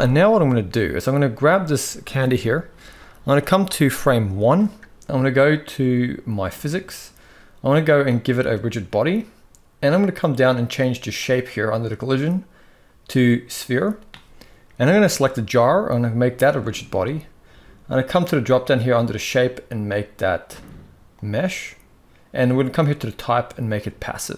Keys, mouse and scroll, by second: 2.8 click, 6.2 click, 10.9-13.4 drag, 14.9 click, 18.7-21.0 drag, 22.7-23.6 drag.